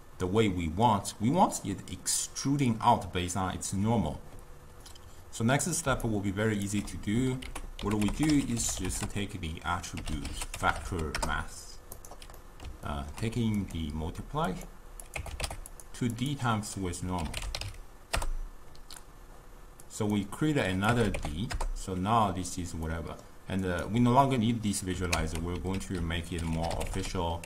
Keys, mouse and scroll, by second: 5.9 d, 6.1 right click, 6.8 d, 7.5 ctrl+a, 8.2 t, 12.5-13.6 middle drag, 13.6-16.4 drag, 16.6-19.6 drag, 19.9-22.9 drag, 22.9-23.7 middle drag, 23.7 click, 25.2 ctrl+x, 25.8 ctrl+a.